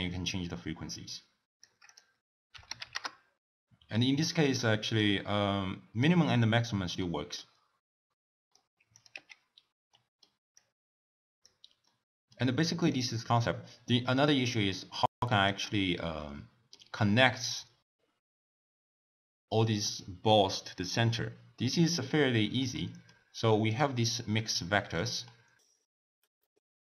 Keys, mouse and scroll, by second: 4.1-5.1 middle drag, 5.1 click, 7.1 middle click, 7.7-8.2 scroll down 1, 8.2-9.1 middle drag, 9.1 click, 9.4 x, 10.0-10.6 middle drag, 10.6 click, 11.9-13.0 middle drag, 13.0 click, 14.3-14.9 middle drag, 14.9-16.1 shift+drag, 16.1-19.1 middle drag, 22.6-23.6 middle drag, 23.6 click, 24.0-25.3 drag, 25.3-26.3 middle drag.